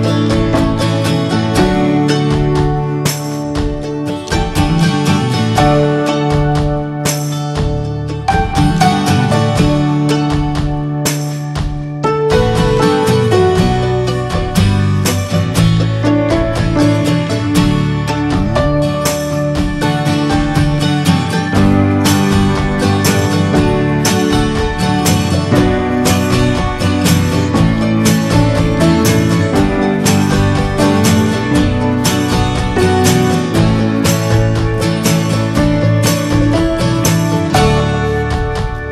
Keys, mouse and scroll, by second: 1.3-2.3 middle drag, 2.8 shift+middle click, 3.1-4.4 scroll up 2, 4.4-17.3 drag, 17.3-17.8 scroll up 6, 17.9-23.9 shift+middle drag, 23.9 f, 29.3 click, 29.8-30.5 scroll down 2, 30.5 scroll up 2, 34.0-35.1 ctrl+drag, 35.1 ctrl+z, 36.3-38.9 drag.